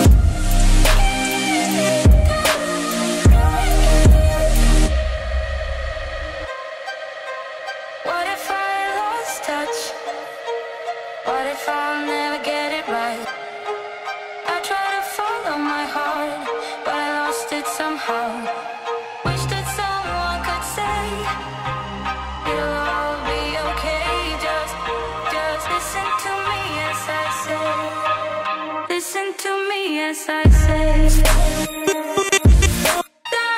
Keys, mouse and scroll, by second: 8.9-9.8 drag, 13.7 space, 19.5 click, 22.9 click, 26.3 space.